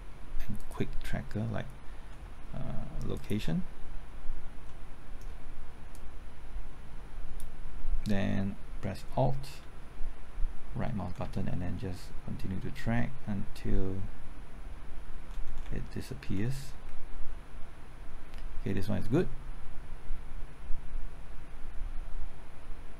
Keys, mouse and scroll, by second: 3.1 ctrl+click, 4.6-5.8 middle drag, 5.9-7.8 drag, 10.6 alt+Right, 11.3 alt+Right, 17.3 Left, 21.4-22.2 typing.